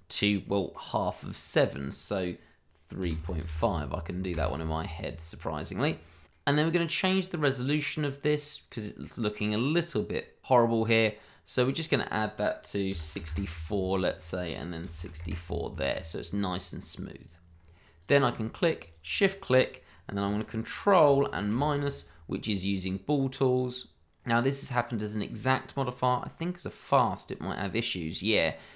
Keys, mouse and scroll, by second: 0.4 middle click, 1.7 click, 3.0 3, 3.2 ., 3.4 5, 4.3 Return, 5.3-6.2 scroll down 1, 6.7 middle click, 8.1 scroll up 1, 8.7 middle click, 11.8 click, 12.9 6, 13.1 4, 13.2 Return, 14.1 click, 14.8 6, 15.2 Return, 16.0-17.2 scroll down 1, 17.2 click, 17.5-18.0 scroll up 1, 18.0 click, 18.8 shift+click, 18.8 click, 21.5 ctrl+-, 24.1-24.7 scroll up 1, 24.7 middle click, 25.8 click.